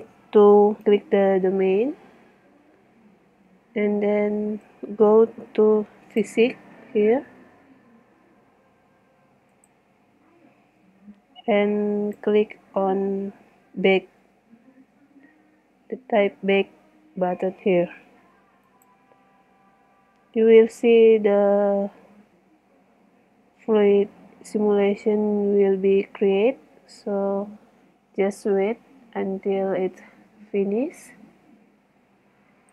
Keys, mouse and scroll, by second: 4.7 middle click, 5.2 right click, 6.7-8.0 middle drag, 12.0-13.4 drag, 13.7 middle click, 14.5-15.5 middle drag, 32.6 click.